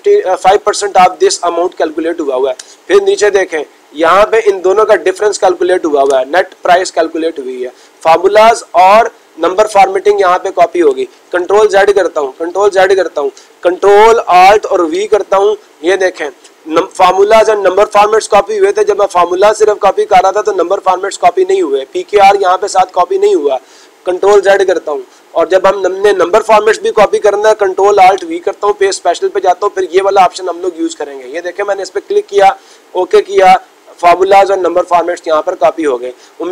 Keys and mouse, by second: 4.1 click, 19.5 click, 20.6 click, 25.9 click, 31.1-32.1 drag, 32.7-33.8 drag.